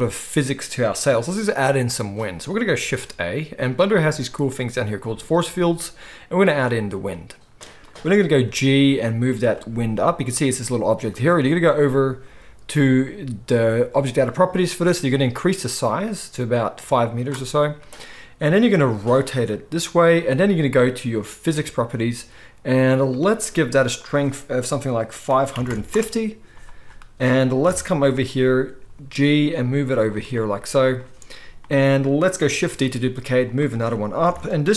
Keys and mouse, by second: 2.9 shift+a, 8.1 s, 8.4 g, 9.5-14.0 middle drag, 14.0 click, 14.1-14.9 middle drag, 14.9-21.7 drag, 18.7 r, 21.7-23.9 middle drag, 23.9-30.0 drag, 25.5 5, 27.6 KP_7, 28.8 g, 30.0-34.7 middle drag, 32.6 shift+d, 34.2 KP_7.